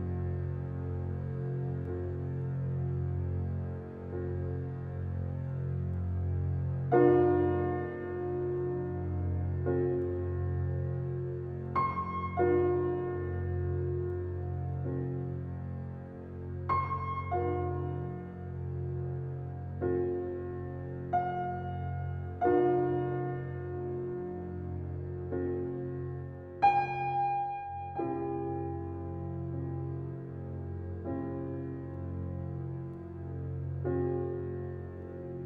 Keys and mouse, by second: 0.3 alt+click, 0.9 Tab, 3.9-5.9 drag, 6.7 alt+click, 8.0 KP_Divide, 8.7 KP_Divide, 9.6-11.1 alt+drag, 11.5 click, 12.0 alt+click, 12.9 alt+shift+click, 13.4 alt+click, 14.1 g, 16.2-18.8 drag, 18.4 ctrl+z, 19.3 alt+click, 19.8 alt+click, 20.5 g, 20.9 x, 21.8-24.2 alt+drag, 22.6 typing, 24.2 middle click, 24.3-24.9 typing, 25.9-29.2 alt+drag, 29.6 click, 30.7 click, 31.7-32.1 typing, 33.3 alt+click, 34.4 ctrl+alt+click, 34.8 ctrl+alt+click, 35.1-35.4 typing.